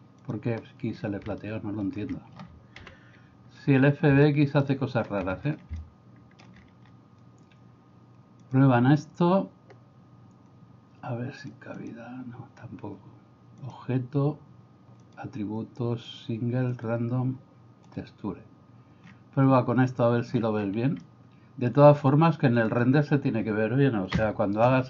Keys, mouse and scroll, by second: 1.5 middle click, 2.8 KP_1, 2.8 KP_2, 4.3 middle click, 4.9 middle click, 5.9 shift+middle click, 8.5-20.4 drag, 21.1 middle click, 24.3 F1.